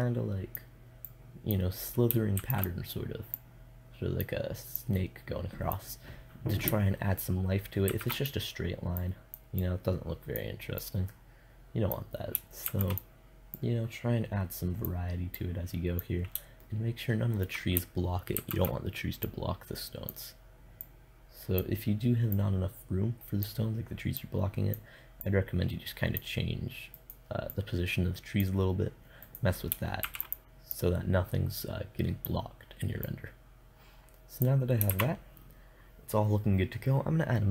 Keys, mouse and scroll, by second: 1.8 shift+d, 7.3 shift+d, 9.8-10.9 drag, 12.1 shift+d, 17.8 shift+d, 29.0 right click, 29.5 shift+d, 30.5-32.1 drag, 32.5-34.4 drag, 34.4 shift+z, 37.2 shift+z.